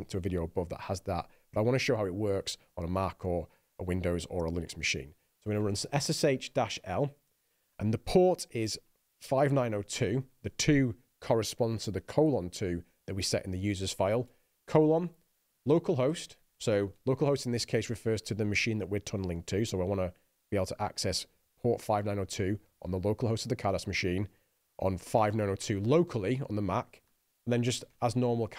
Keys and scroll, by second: 5.8-7.6 typing, 9.4-10.8 typing, 14.5-17.7 typing, 25.2-28.5 typing.